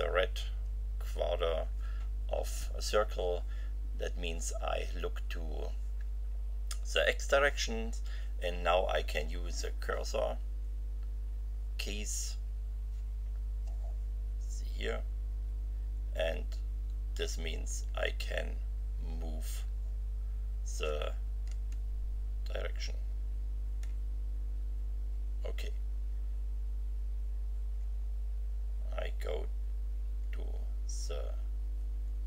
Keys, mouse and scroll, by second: 15.1 BackSpace, 17.5 Left, 21.4 Left, 23.8 Right, 25.6 BackSpace.